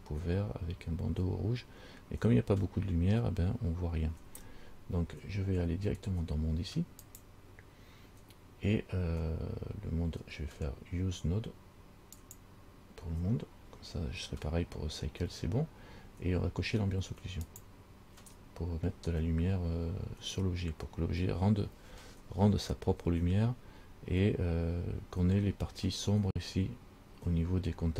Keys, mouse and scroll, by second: 0.8-1.3 scroll up 3, 7.3 click, 12.4 click, 17.7 click, 22.3-23.9 scroll up 9.